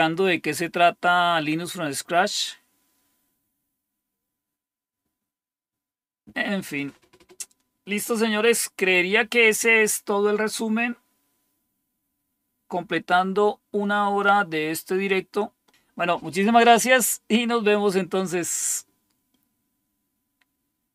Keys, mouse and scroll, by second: 1.6-20.9 scroll down 1.